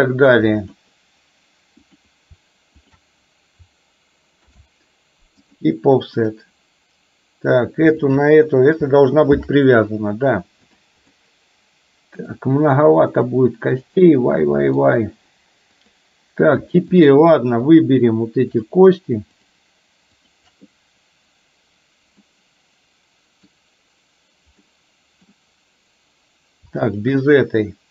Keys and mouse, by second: 2.0 click, 4.5 ctrl+p, 6.2 click, 8.1 shift+click, 9.5 ctrl+p, 11.2-12.3 middle drag, 13.2-15.0 middle drag, 15.8 click, 17.0 shift+click, 17.8 shift+click, 18.6 shift+click, 20.2 shift+click, 22.2-23.6 middle drag, 24.6 middle click, 26.8 shift+click.